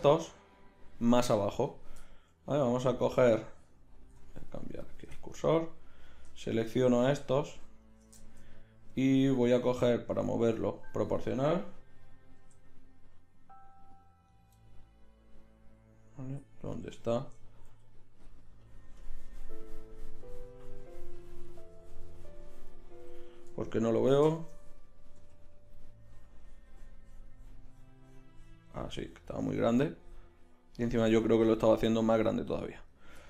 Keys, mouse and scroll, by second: 3.7 click, 4.1 ., 7.7 right click, 9.6-11.0 middle drag, 12.4 g, 17.6 g, 25.2 g.